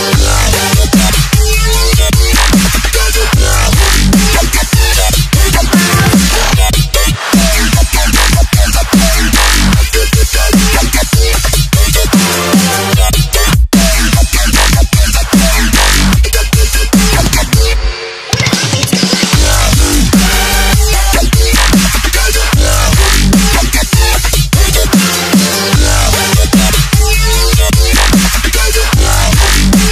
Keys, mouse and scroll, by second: 0.2 ctrl+v, 0.8 alt+Tab, 1.5 ctrl+c, 1.7 alt+Tab, 2.0 click, 2.6-3.3 typing, 3.4 click, 9.1 alt+scroll up 1, 9.5 click, 10.8 KP_Add, 11.0-14.3 typing, 12.4 Return, 12.7 KP_Add, 14.7 click, 17.4 Tab, 17.4 click, 18.2 ctrl+c, 18.4 alt+Tab, 18.9 v, 19.5 click, 23.0 ctrl+t, 23.3 click, 24.1 Return, 25.2 click, 25.9 ctrl+c, 26.4 click, 27.5 v, 28.1 click, 28.2 Return, 28.7 click, 28.8 Return, 29.4 click.